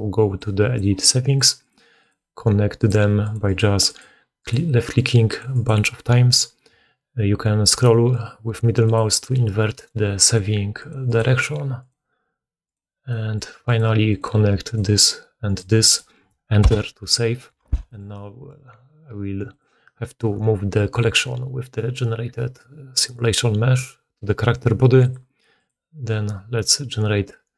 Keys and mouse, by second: 0.3-19.5 drag, 4.5-4.9 middle drag, 17.5 1, 19.5-20.9 middle drag, 20.9-22.8 drag, 22.8-24.9 middle drag, 24.9 click, 25.1-25.5 middle drag, 25.5 click, 25.6-27.5 middle drag.